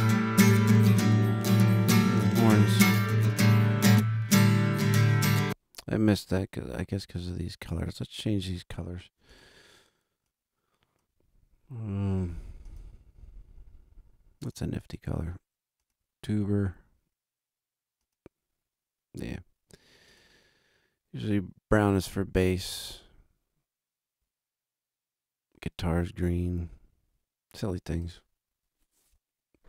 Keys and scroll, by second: 5.2 space.